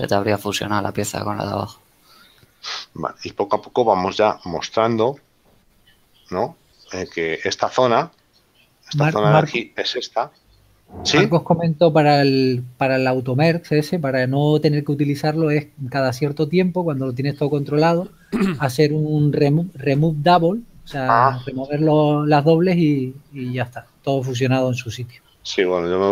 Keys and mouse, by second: 5.2 shift+middle click, 13.5 middle click, 15.2 shift+middle click, 16.6 Tab, 17.7 shift+middle click.